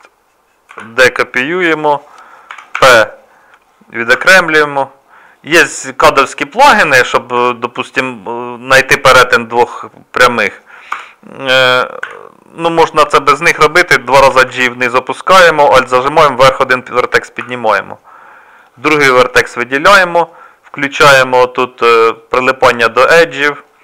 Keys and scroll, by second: 0.7 shift+d, 2.5 p, 4.2 Tab, 7.4 z, 10.9 Tab, 12.0 1, 14.2 g, 17.4 z.